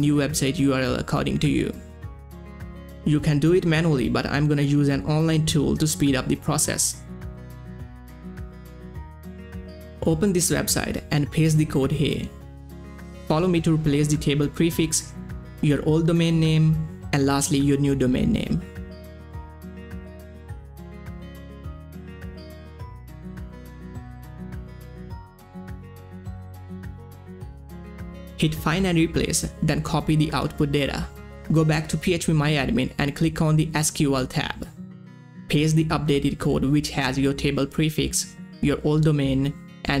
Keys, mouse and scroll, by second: 2.4 ctrl+a, 3.1 ctrl+c, 3.8 click, 3.9-5.1 typing, 6.3-9.4 typing, 9.8 click, 11.2 scroll down 1, 11.5 click, 11.7 ctrl+v, 12.9 click, 13.7 ctrl+c, 13.9 scroll down 1, 14.4 click, 14.5 ctrl+v, 15.1 click, 15.9 ctrl+c, 16.2 click, 16.3 ctrl+v, 16.7 click, 16.9 scroll up 1, 17.8 click, 18.6 ctrl+c, 18.7 scroll down 1, 19.3 click, 19.4 scroll down 1, 19.9 click, 20.6 click, 21.6 ctrl+click, 22.0 ctrl+c, 22.4 ctrl+v, 22.7-23.5 scroll up 2, 23.8 scroll up 1, 23.9 click, 24.8 ctrl+c, 24.9 scroll down 1, 25.5 click, 25.7 ctrl+v, 26.2 click, 27.4 ctrl+c, 27.7 click, 27.8 ctrl+v, 28.8 click, 29.2 scroll up 1, 30.6 ctrl+c, 31.5 click, 33.5 click, 35.2 click, 35.4 ctrl+v, 37.8 ctrl+v, 37.8-39.4 drag, 39.4-40.0 drag.